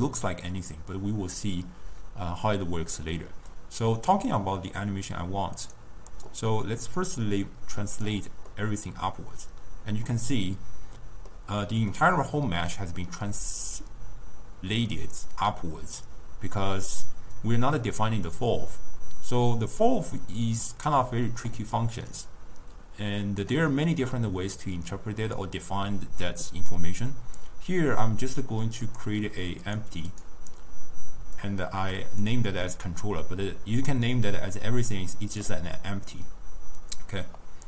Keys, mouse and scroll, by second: 6.0 click, 7.0-8.5 drag, 8.5-11.6 middle drag, 12.0-15.0 middle drag, 15.0-20.8 drag, 22.2-27.9 drag, 28.9 click, 29.7 click, 30.2 click, 31.5-34.5 drag, 35.3 click.